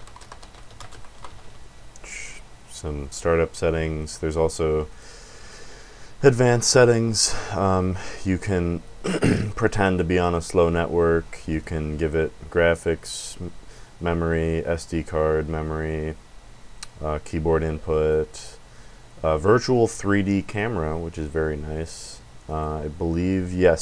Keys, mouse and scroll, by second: 0.0-1.9 typing, 4.9 click, 6.8 click, 8.3 click, 9.8 click, 11.6 click, 17.4 click, 22.4 click, 23.5 click.